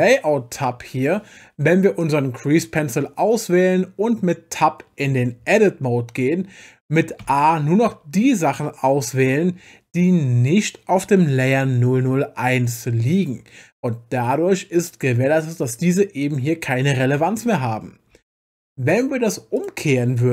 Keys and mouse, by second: 0.0-2.1 drag, 5.6 Tab, 7.2 a, 18.1 Tab, 19.6 click.